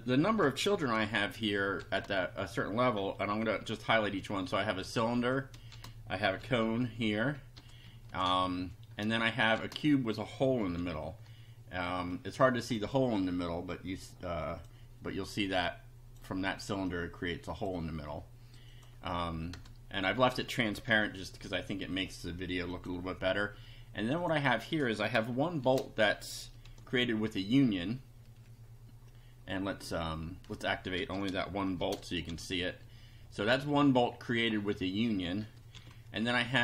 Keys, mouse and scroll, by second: 0.2 Home, 1.8 shift+3, 3.6 F5, 4.8 BackSpace, 5.2 Up, 5.7 shift+3, 6.4 F5, 7.6 BackSpace, 7.8 Up, 9.0 shift+Up, 9.6 shift+3, 10.8 F5, 13.7-14.8 drag, 15.5 click, 16.8 click, 18.7 click, 19.6 BackSpace, 20.1 Up, 20.9 F5, 22.7 click, 24.2 click, 25.6 shift+3, 26.6 F5, 31.0 BackSpace, 31.8 shift+1, 32.2 shift+F5, 35.4 BackSpace, 35.8 F5, 36.2 Down.